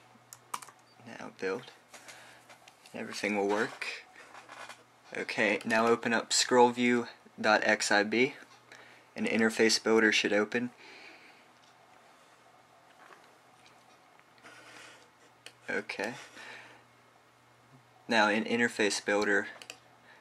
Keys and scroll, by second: 1.4 typing, 1.5 super+b.